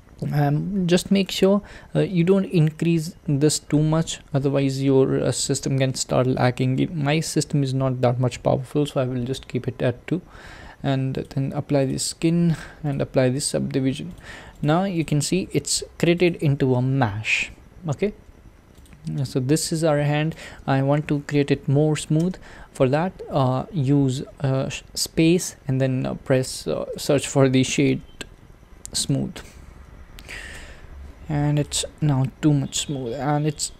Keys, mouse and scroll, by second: 5.4 click, 11.9-14.6 drag, 15.3 Tab, 16.3 click, 18.3 Tab, 18.8 click, 19.2-20.4 middle drag, 20.4 click, 31.6 click, 32.1-33.7 middle drag.